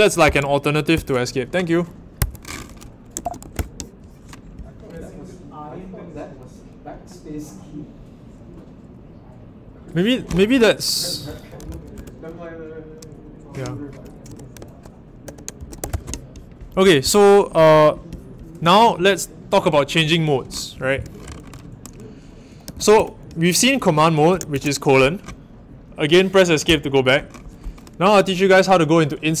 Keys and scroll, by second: 0.2 i, 0.9 ctrl+[, 2.1 Escape, 2.9-3.9 typing, 11.3-12.4 typing, 15.3-17.5 typing, 22.4-23.4 typing, 24.5 shift+;, 26.6 Escape.